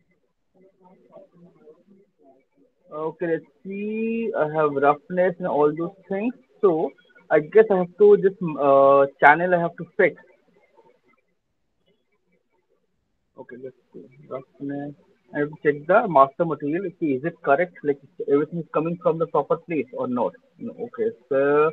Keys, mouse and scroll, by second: 0.2 click, 1.6 click, 1.8 scroll, 2.2 scroll down 6, 2.8-3.6 scroll down 6, 4.0 scroll down 1, 6.1 scroll, 8.6 scroll, 8.8 click, 12.3 click, 14.8 middle click, 14.9 click, 15.3-16.1 scroll, 16.6 click, 16.8 click, 18.6-19.5 scroll, 19.5 click, 19.5-19.9 scroll, 20.4 click, 21.2-21.7 scroll.